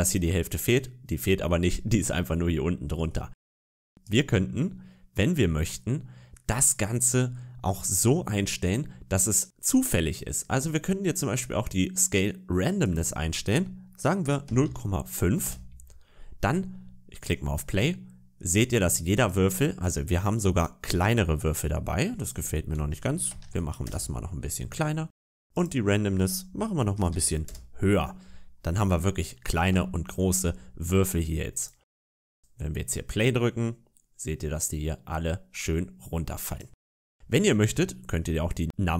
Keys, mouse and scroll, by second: 0.4 middle click, 2.6-3.1 scroll down 3, 2.9 middle click, 3.3 scroll up 3, 3.9 right click, 12.7 click, 17.5 click, 19.0 click, 19.8 scroll up 2, 20.1-20.5 scroll down 2, 20.5 middle click, 22.1 click, 25.4 click, 28.5 scroll down 3, 29.4 scroll up 2, 29.8 shift+middle click, 31.4 click, 32.1 click, 36.3 click, 37.1-38.9 scroll up 8.